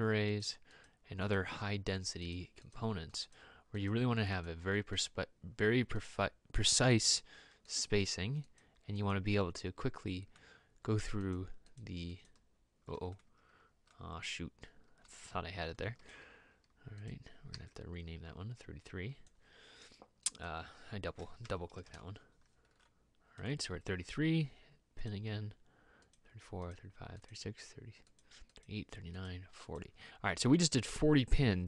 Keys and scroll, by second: 16.1 ctrl+z, 17.7 e, 21.4 typing, 22.0 Return.